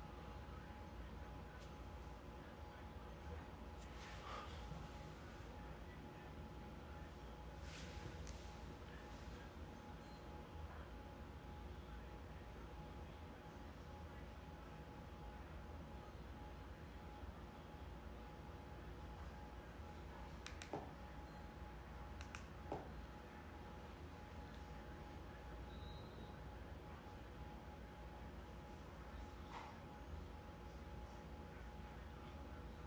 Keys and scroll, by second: 20.6 Right, 23.2 Return, 31.8 Return.